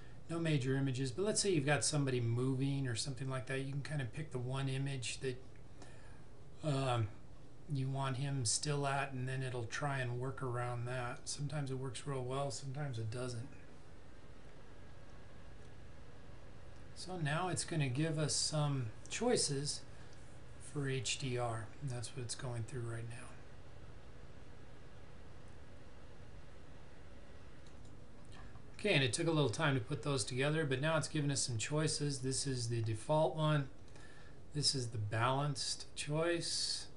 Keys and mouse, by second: 11.2 click, 27.7 click, 32.1 click.